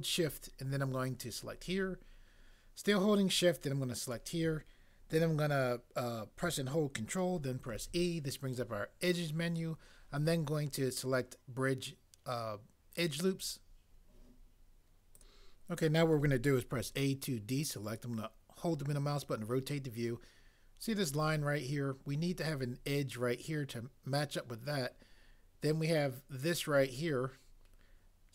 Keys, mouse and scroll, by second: 7.7 ctrl+e, 16.7 a.